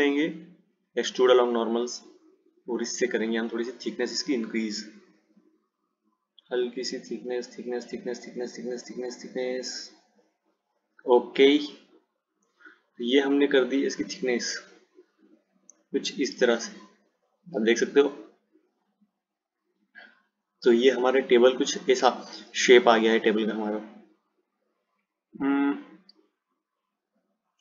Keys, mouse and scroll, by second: 0.0-3.1 drag, 3.1 click, 12.1 click, 14.3 click, 16.3 click, 19.4 click.